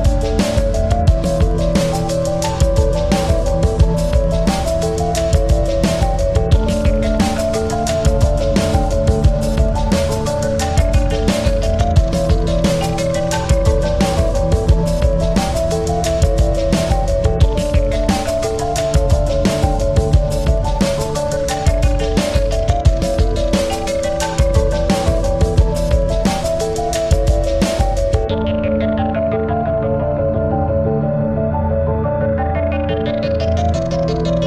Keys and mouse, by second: 2.0 click, 2.0-3.0 typing, 2.7 click, 3.7 click, 5.4 click, 5.4 typing, 6.9 click, 6.9 typing, 8.1 space, 8.2 click, 8.6 space, 10.5 click, 11.2 space, 12.7 click, 14.2 typing, 15.4 click, 16.2 space, 16.3 click, 16.7 space, 17.5 click, 18.2-20.9 shift+drag, 20.9 typing, 23.0 click, 23.0 typing, 24.2 click, 24.2 typing, 25.6 click, 25.6 typing, 26.9-29.3 drag, 27.0 typing, 32.6-34.1 drag, 32.6 typing.